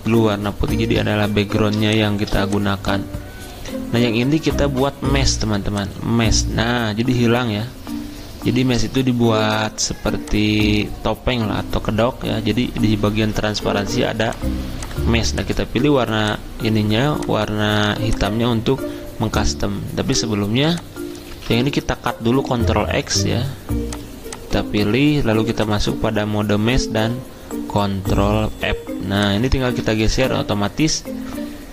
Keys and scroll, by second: 21.3 ctrl+z, 22.5 ctrl+x, 28.4 ctrl+f.